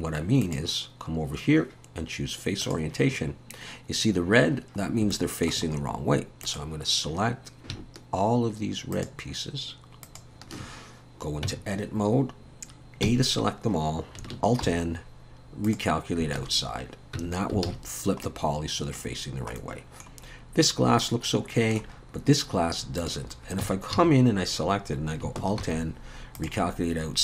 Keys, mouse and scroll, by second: 0.4 click, 4.8 scroll up 2, 5.1 shift+middle click, 6.4 click, 8.9 shift+click, 10.0 shift+click, 11.5 Tab, 13.0 a, 14.6 alt+n, 16.4 alt+a, 17.2 Tab, 17.7 alt+a, 17.9-18.2 scroll down 1, 18.2 middle click, 19.1-19.5 scroll down 3, 19.6 middle click, 22.0-23.6 scroll up 5, 23.0 click, 23.6 Tab, 23.9 a, 25.8 alt+n.